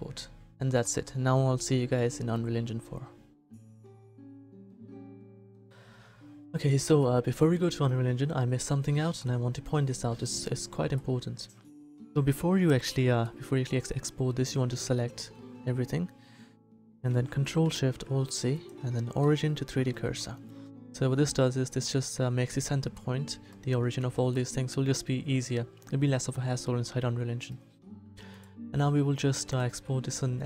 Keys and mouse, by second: 0.8 middle click, 14.8 a, 15.2 a, 17.7 ctrl+alt+shift+c, 24.1 a, 26.2-28.3 middle drag.